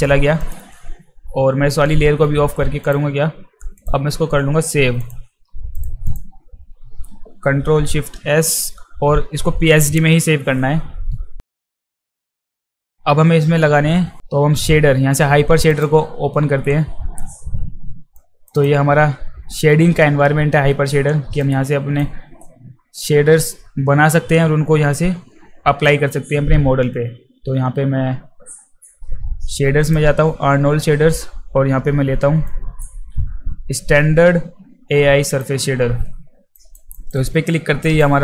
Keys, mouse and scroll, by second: 0.4 click, 1.9 z, 2.8 click, 3.8 click, 4.4 z, 5.0 click, 5.8 click, 8.0 ctrl+shift+s, 11.5 shift+s, 11.9 click, 12.1 click, 12.6 click, 15.7 click, 18.2 click, 18.5 click, 21.4 click, 29.8 click, 32.5 click, 35.3 click, 36.5 alt+right click, 36.9 alt+right click, 37.8 alt+right click.